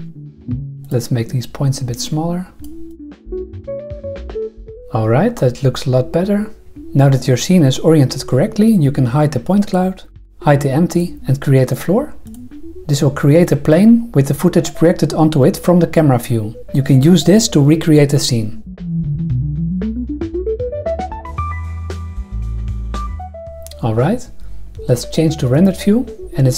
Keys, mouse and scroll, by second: 0.3 r, 0.3 click, 0.4 g, 0.5 r, 0.8 click, 2.0 click, 2.9 click, 3.1-4.5 typing, 9.6 click, 10.1 h, 10.9 click, 12.2 click, 16.6 Tab, 16.8 ctrl+r, 16.9-21.5 typing, 18.5 Tab, 18.5 shift+Right, 18.6 Tab, 18.9 Tab, 19.4 ctrl+g, 19.5 shift+Left, 20.2 alt+z, 20.5 click, 20.7 ctrl+r, 21.0 ctrl+r, 21.1 ctrl+z, 21.2 ctrl+r, 21.5 ctrl+r, 21.7 ctrl+r, 21.9 ctrl+r, 22.5-23.1 typing, 23.0 ctrl+r, 23.3 Tab, 25.5 click.